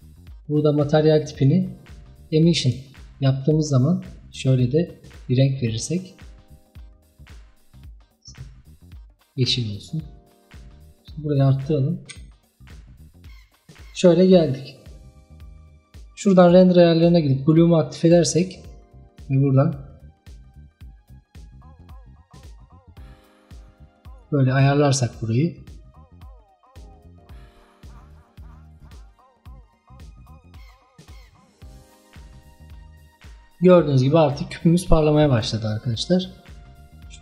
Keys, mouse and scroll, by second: 1.4-7.2 drag, 10.2-12.2 drag, 12.2 z, 16.4-17.6 drag, 19.1-27.6 drag, 28.0-29.1 drag, 29.1-30.0 scroll down 2, 30.0-33.3 drag, 33.3-36.3 scroll down 3, 36.6-37.2 drag.